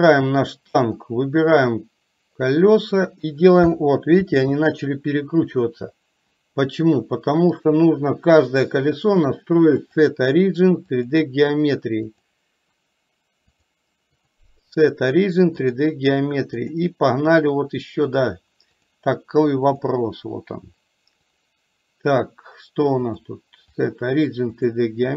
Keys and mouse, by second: 1.1-3.1 drag, 4.3 ctrl+z, 7.7 click, 9.2-11.2 drag, 12.2 click, 14.3-15.9 drag, 16.7 click, 18.2-20.0 drag, 23.2-24.8 drag.